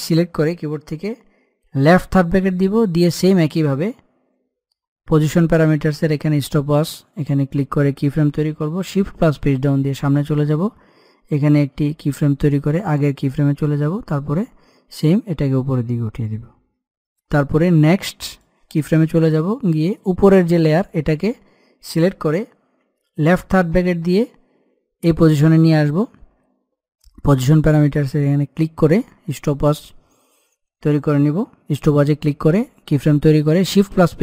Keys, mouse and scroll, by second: 5.9 click, 9.1 Page_Down, 11.7 click, 14.6-18.0 shift+drag, 19.5-20.4 scroll up 1, 20.4 click, 27.3 click, 33.2 click, 33.7 Page_Down.